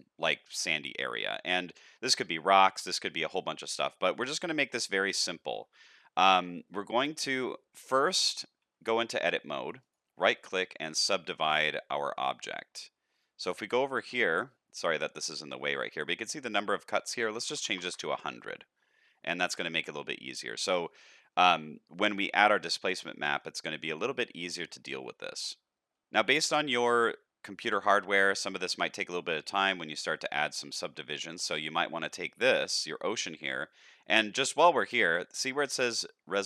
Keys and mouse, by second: 5.2 shift+middle drag, 5.7 middle click, 7.1 click, 8.2 Tab, 9.8-10.7 right drag, 16.4-18.3 drag, 17.7 KP_0, 18.7 middle click, 19.5 Tab, 20.1-20.6 middle drag, 20.8 shift+middle drag, 21.3 middle click, 22.8 shift+middle drag, 23.1 middle click, 24.5 shift+middle click, 26.5 shift+middle drag, 27.0 middle click, 30.6 shift+middle click, 31.4 click.